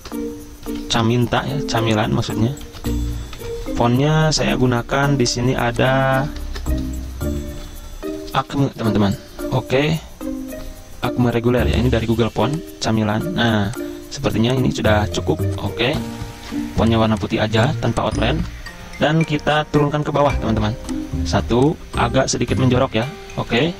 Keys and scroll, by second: 0.0-0.6 typing, 2.2-3.4 typing, 6.5 ctrl+a, 8.8 a, 10.2 c, 16.1 d, 17.5 z, 18.4 v.